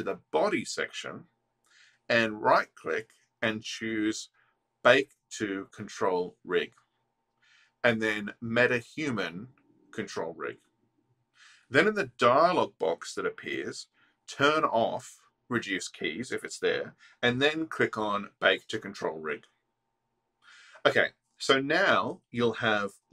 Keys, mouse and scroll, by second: 4.7 right click, 6.0 click, 7.2-11.4 drag, 17.9-20.0 drag, 22.7 space.